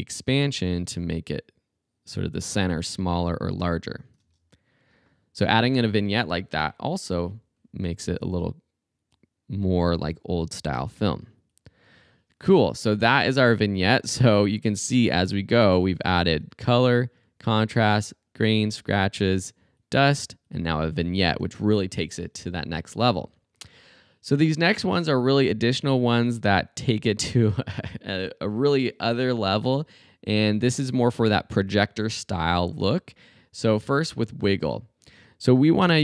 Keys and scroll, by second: 4.2 space, 14.2 space.